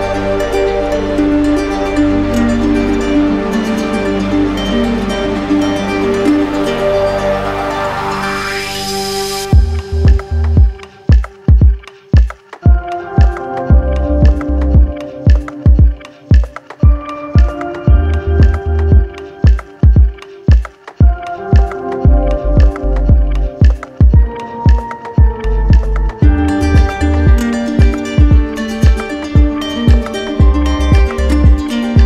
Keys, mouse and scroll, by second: 2.6-3.7 middle drag, 4.3 middle click, 6.8 right click, 7.9 right click, 7.9 click, 9.4 click, 11.7 alt+click, 14.1 z, 15.3 click, 16.1 right click, 16.9 click, 17.6 shift+click, 18.3 alt+click, 20.6 click, 21.5 click, 23.0 click, 23.3 ctrl+z, 24.3 alt+right click, 25.2 click, 25.9 click, 26.4 click.